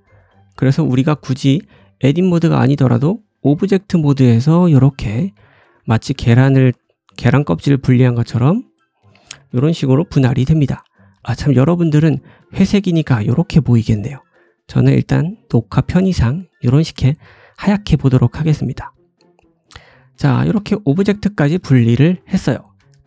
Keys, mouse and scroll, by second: 0.8 Tab, 1.1 middle click, 1.1 right click, 1.8 middle click, 1.8 right click, 2.8 g, 4.6 ctrl+z, 4.8 middle click, 4.8 right click, 5.0 g, 5.9 ctrl+z, 6.1 g, 6.6 ctrl+z, 7.0 click, 7.2 g, 7.9 middle click, 9.4 ctrl+z, 9.7 click, 9.7 middle click, 10.4 middle click, 10.7 `, 11.2 click, 12.3 click, 12.7 click, 15.9-21.8 drag, 16.0 right click, 19.2-19.7 scroll down 2, 20.0 shift+middle click, 20.5 shift+middle click, 20.5-20.9 scroll up 1, 21.0 shift+middle click, 21.8-23.0 ctrl+middle drag.